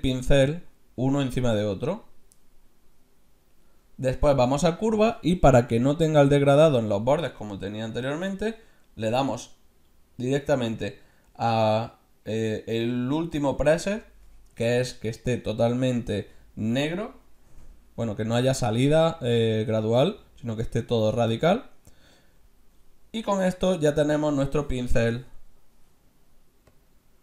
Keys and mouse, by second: 9.0-10.8 drag, 13.2-15.0 drag, 17.6 f, 24.4 middle click, 26.7-27.2 drag.